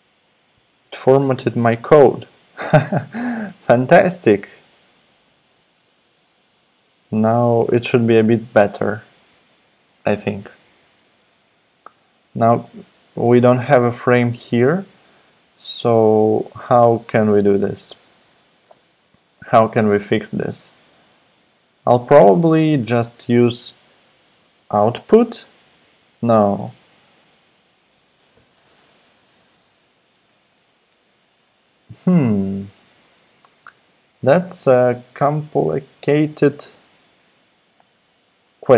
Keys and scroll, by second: 28.5 Return, 28.7 Return.